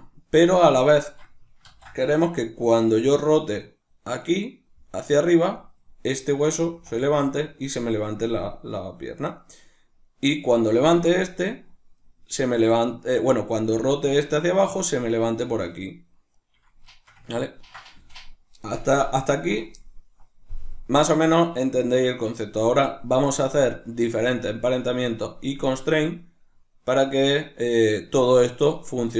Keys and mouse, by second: 0.5 right click, 1.7 ctrl+z, 2.7 r, 5.5 right click, 6.5 right click, 6.7 r, 7.3 right click, 10.2 right click, 10.8 r, 12.1 right click, 13.2 right click, 13.7 r, 14.9 right click, 15.2 r, 16.9-29.1 shift+middle drag.